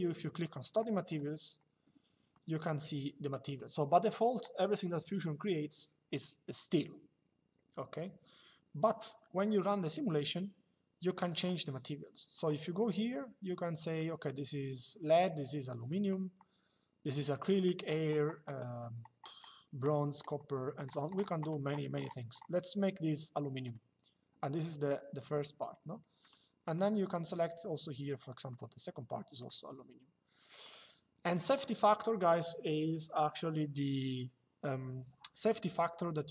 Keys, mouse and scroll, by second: 0.8 click, 2.0 click, 11.0 click, 12.0 click, 23.3 click, 25.9 click, 28.2 click, 30.3 click.